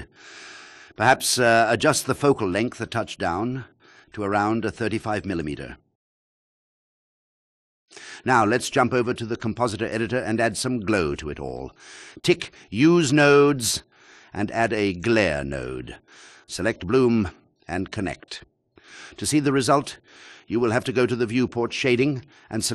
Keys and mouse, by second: 1.5 click, 3.7 alt+click, 4.4 click, 5.9 KP_0, 7.7 space, 9.9 click, 12.1 shift+click, 14.7 click, 17.9 Return, 20.4-21.3 drag.